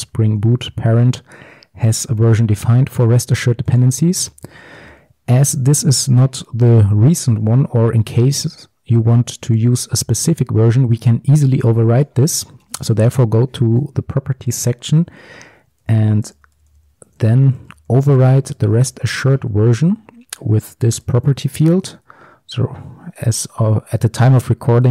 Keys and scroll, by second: 4.5 alt+1.